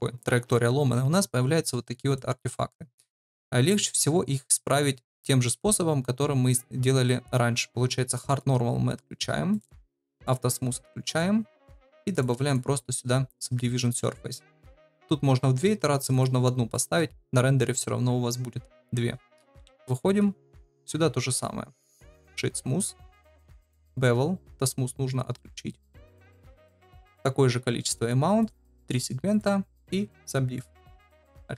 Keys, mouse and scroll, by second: 2.1 click, 8.2 click, 10.2 click, 12.1 click, 14.9-16.2 drag, 16.7 middle drag, 19.6 KP_Divide, 20.6 click, 21.8 right click, 23.3-26.7 drag, 26.9 ctrl+v, 28.3 click, 28.5 click, 31.4 ctrl+s.